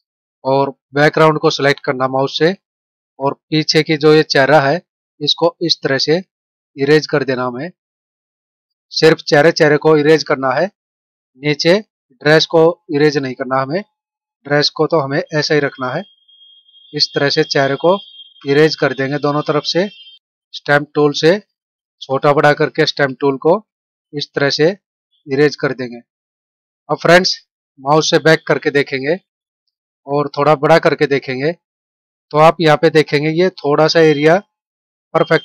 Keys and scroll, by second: 22.1 space, 27.9 ctrl+-, 29.8 ctrl+=, 31.1 space.